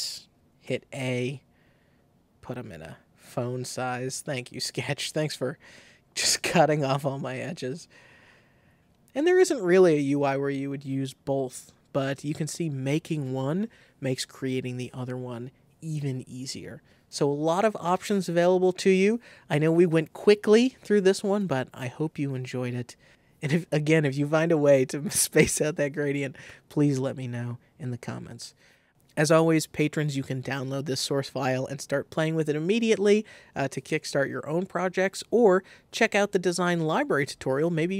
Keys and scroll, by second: 0.6 shift+a.